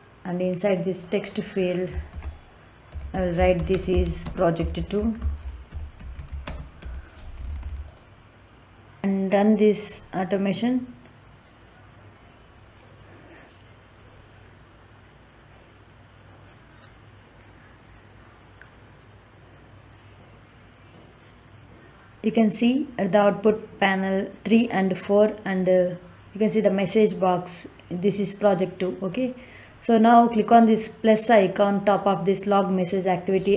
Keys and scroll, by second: 2.0-6.7 typing.